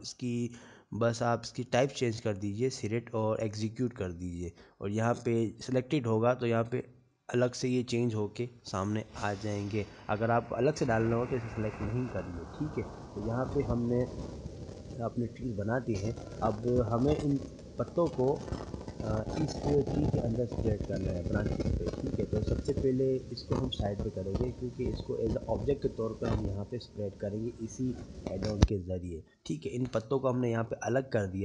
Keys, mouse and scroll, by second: 1.0-1.4 scroll down 2, 1.3 middle click, 2.4 click, 5.2 middle click, 6.2 click, 12.5 click, 13.9-14.3 scroll down 2, 14.3 middle click, 15.3 click, 15.8 middle click, 17.9 scroll down 2, 17.9 scroll up 1, 18.6 middle click, 19.1 scroll up 1, 19.1 scroll down 1, 19.7 shift+scroll down 1, 19.8 shift+middle click, 20.7-21.6 scroll down 8, 22.4 middle click, 23.0 scroll up 1, 23.6 scroll up 1, 23.7 middle click, 25.4 g.